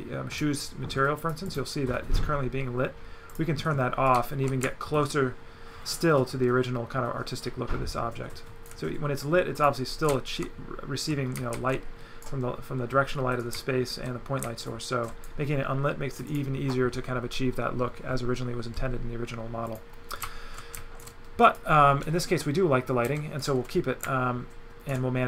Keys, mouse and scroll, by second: 1.2 click, 3.3 click, 4.1 right click, 9.6 click, 10.1 alt+right click, 13.4 right click, 16.3 click, 19.7 click, 20.1 right click, 21.5 click, 23.1 Delete, 23.4 right click.